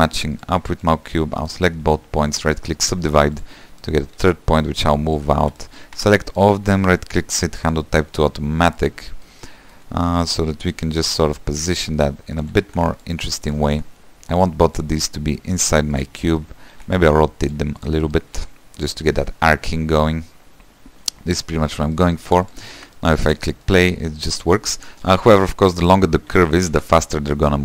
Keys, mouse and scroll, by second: 1.0 click, 2.7 right click, 3.0 middle click, 3.6 click, 3.9 shift+middle click, 4.3 g, 5.7 middle click, 6.1 a, 8.7 right click, 9.0 click, 9.2-11.1 shift+middle drag, 11.1 s, 12.5 s, 12.8 g, 13.7 click, 13.8 g, 14.9 click, 15.2 middle click, 15.6 g, 16.4 middle click, 16.9 r, 18.0 click, 18.2 middle click, 18.5 r, 19.7-22.4 middle drag, 22.4 g, 22.9 Tab, 23.1 middle click, 23.4 space, 23.8-25.5 middle drag, 25.5 Tab, 26.0 click, 26.3 scroll down 1, 26.5 shift+middle click, 26.8 g.